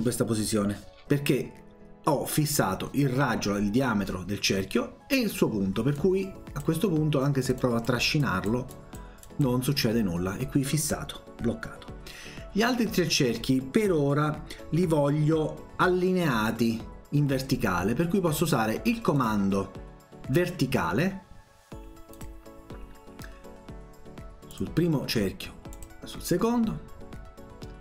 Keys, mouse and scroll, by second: 6.0 click, 7.4 click, 7.6 click, 8.2 click, 8.8 click, 9.3 click, 19.2 click, 22.1 click, 24.6 click, 25.8 click.